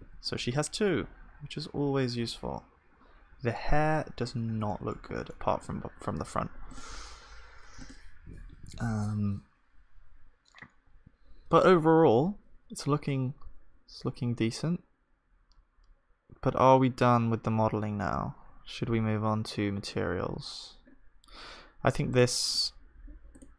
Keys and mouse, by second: 0.0 ctrl+s, 0.0-3.4 drag, 4.0 KP_1, 5.0-7.5 middle drag, 5.3 click, 5.3 right click, 7.5-23.5 drag.